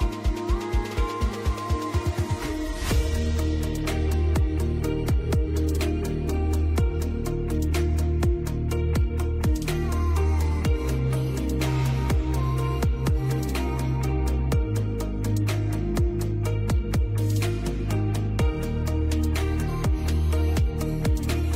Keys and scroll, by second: 1.9 c, 2.2 Escape, 3.7 F3, 5.4 F4, 6.1 ctrl+z, 6.6 ctrl+shift+z, 10.6 F3, 11.0 F2, 16.7 F2.